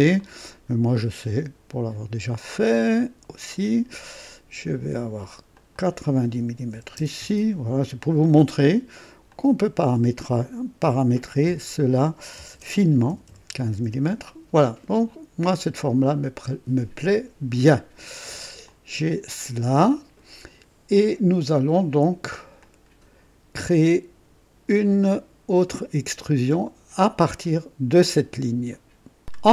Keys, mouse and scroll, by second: 0.1 click, 3.4 click, 5.5 click, 6.7 KP_9, 6.9 KP_0, 7.1 KP_Enter, 9.2 click, 10.8-13.8 typing, 13.8 KP_Enter, 17.0 click, 18.0 scroll down 1, 18.6-20.4 drag, 20.9-22.3 drag, 22.6 click, 23.6 click, 28.6 right click, 29.2 click.